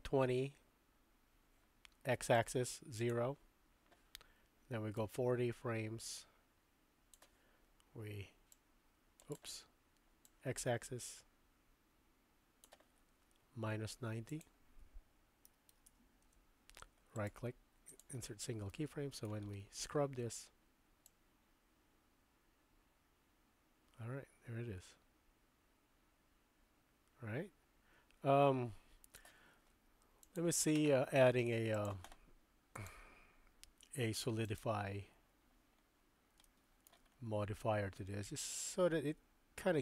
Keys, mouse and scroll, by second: 2.4 right click, 5.0-7.2 drag, 8.6 click, 10.2-12.6 drag, 14.3-17.1 drag, 17.1 middle click, 18.0 click, 18.0 right click, 18.7 middle click, 21.1-29.2 drag, 30.2 click, 31.8 click, 32.7-34.6 drag, 36.4-36.9 shift+middle drag, 38.0 middle click, 38.1 click, 38.2-39.8 middle drag.